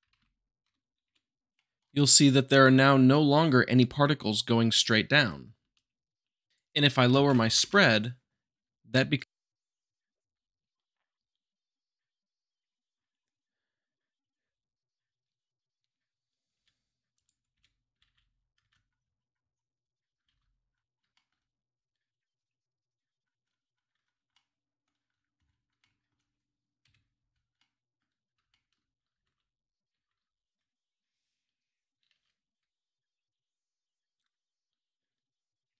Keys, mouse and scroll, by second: 0.1 f, 0.6 Tab, 1.0 `, 1.5-3.0 shift+middle drag, 2.0 scroll up 2, 5.7-6.9 shift+drag, 7.1 shift+Left, 8.9-9.9 middle drag, 10.0 shift+z, 10.5-11.5 middle drag, 12.1 `, 13.5 shift+Left, 13.7 space, 14.7 Left, 16.2 click, 16.5 Right, 16.5 Left, 17.3-17.7 middle drag, 18.0-18.4 scroll up 2, 18.4 scroll down 2, 18.7-19.1 middle drag, 19.1 `, 21.3-22.4 drag, 23.1 s, 23.9 click, 24.1-25.2 middle drag, 26.6 Tab, 27.2 shift+Left, 27.7 Right, 28.1 Right, 28.4 `, 28.5 Right, 29.0 click, 29.4 shift+click, 29.6 shift+Left, 29.7 Right, 30.0 shift+Left, 30.1-34.4 typing, 30.4 click, 31.1 middle click, 31.6 Tab, 31.7 middle click, 31.8 click, 31.9 middle click, 32.0 click, 32.1 Tab, 32.3 shift+Left, 32.5 shift+Left, 32.8 middle drag, 33.7 middle click, 34.2 middle click.